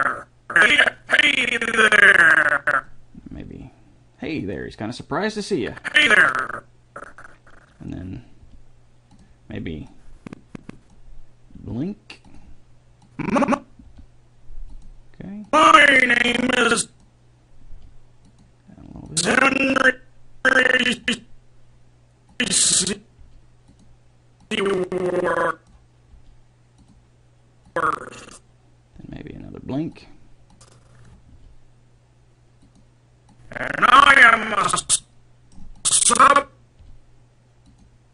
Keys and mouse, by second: 3.6 g, 5.8-6.8 drag, 8.6 g, 11.9 g, 14.1 g, 17.9 g, 22.5-23.6 drag, 23.6 g, 26.3 g, 29.2 g, 31.5 g, 35.2 middle click, 36.0-37.0 drag, 37.0 g.